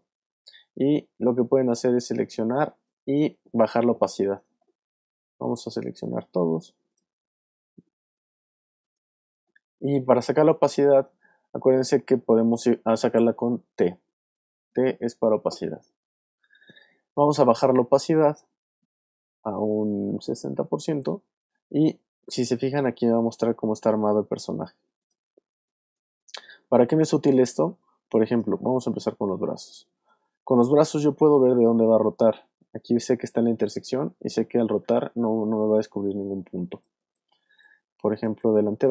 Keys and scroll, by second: 2.5 space, 21.7 space, 22.5 alt+space, 23.7 alt+space, 24.7 space, 25.5 space, 29.3 alt+space, 30.3 space, 31.0 y, 35.5 space, 37.9 space.